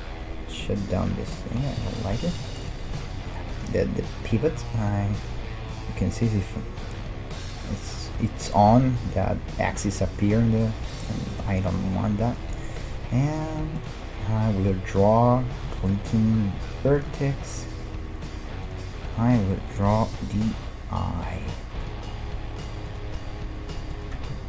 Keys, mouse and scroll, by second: 1.0-2.7 drag, 1.5-4.3 middle drag, 5.7-7.5 drag, 7.1-8.7 middle drag, 11.0-16.7 drag, 11.3-13.1 middle drag, 15.7-17.5 middle drag, 17.0-21.5 drag, 21.9-24.4 drag.